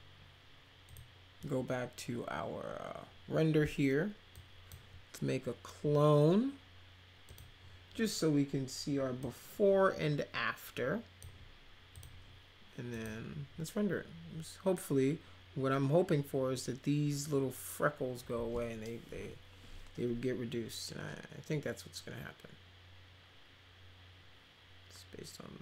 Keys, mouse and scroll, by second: 0.8 click, 4.3-4.6 drag, 7.2 click, 9.1-11.2 drag, 11.9 click, 12.9 click.